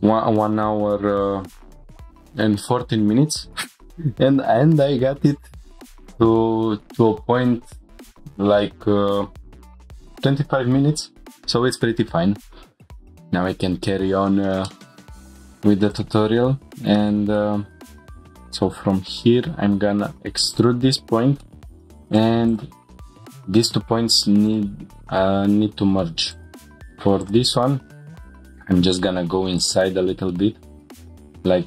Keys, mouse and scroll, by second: 0.4 e, 0.7 x, 6.0 click, 14.7 middle click, 15.1 scroll up 3, 15.7 2, 15.9-16.9 drag, 16.9 middle click, 17.4 click, 17.8 e, 18.7 x, 20.5-20.9 drag, 20.9 scroll up 1, 21.2 1, 21.4-21.7 drag, 21.4 middle click, 22.1 click, 22.5 shift+click, 23.5 m, 26.3 click, 28.3 g, 28.6 y, 29.6-29.9 drag, 29.9 scroll down 1, 30.3-30.9 middle drag.